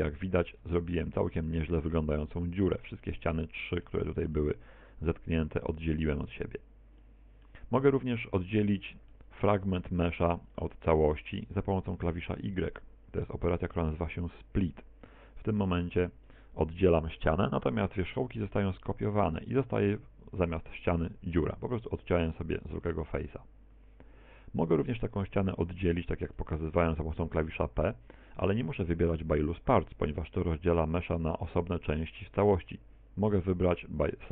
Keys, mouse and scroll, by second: 0.3 middle click, 0.6 Tab, 0.9 middle click, 1.4 z, 1.7 middle click, 3.2 middle click, 3.7 middle click, 4.1-5.2 scroll up 7, 5.2-5.7 scroll up 1, 5.7 z, 7.0 middle click, 7.8-8.3 scroll down 7, 8.3 shift+middle click, 8.8 middle click, 9.6 Tab, 10.1 right click, 10.6 shift+right click, 11.2 right click, 11.9 shift+right click, 13.6 y, 14.2 click, 16.0 g, 16.6 click, 22.7 Tab, 23.2 Tab, 27.2 p.